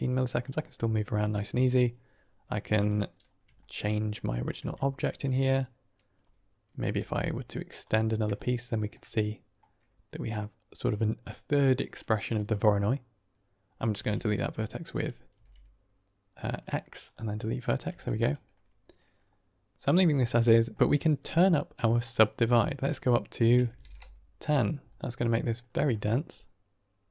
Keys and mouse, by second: 0.6-1.1 middle drag, 3.5 shift+drag, 3.7 drag, 4.6 Tab, 5.3 click, 7.2 e, 7.9 click, 8.5 shift+click, 8.8 shift+middle click, 10.0 typing, 12.5 click, 14.1 z, 15.4 x, 17.2 typing, 17.9 Tab, 18.4-18.9 middle drag, 20.1 middle click, 21.7 middle click, 22.4-24.5 drag, 24.9-25.4 middle drag, 26.0-27.1 middle drag.